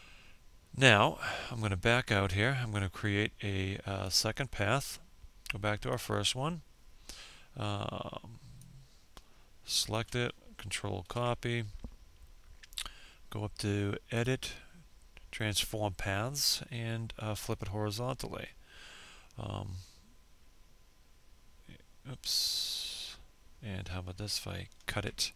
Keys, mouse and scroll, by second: 0.1 scroll down 1, 0.7-2.7 scroll down 1, 2.7 click, 7.3 ctrl+click, 9.7 ctrl+c, 12.8 click, 16.1 click, 23.3 ctrl+x.